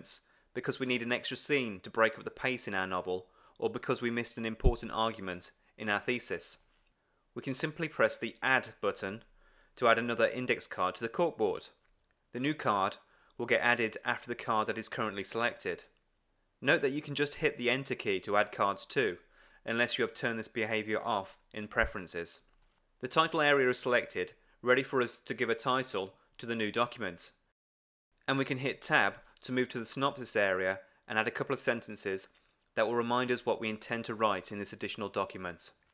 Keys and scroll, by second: 22.5 Return, 28.6 Tab.